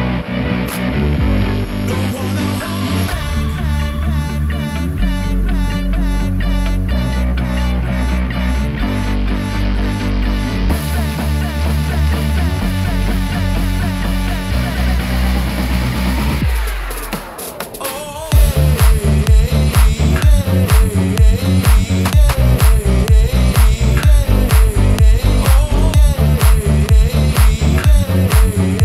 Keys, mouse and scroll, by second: 0.0 /, 0.6-1.1 scroll down 2, 1.1-1.8 middle drag, 2.2 middle click, 3.1 middle click, 3.8-5.0 scroll down 2, 4.3-5.3 middle drag, 5.5-6.0 middle drag, 6.2 click, 6.8 Tab, 7.6 click, 8.3 middle click, 9.1 Tab, 9.6 click, 11.0 click, 11.2-15.5 drag, 16.2 click, 16.9 Tab, 17.4 click, 18.5 3, 18.9 click, 19.4 shift+click, 19.8 shift+click, 20.2 shift+click, 20.8 scroll down 1, 21.1 middle click, 22.0 shift+middle click, 22.5-22.8 scroll up 2, 23.0 shift+middle click, 23.9 e, 27.7 click, 28.0 s, 28.3 y.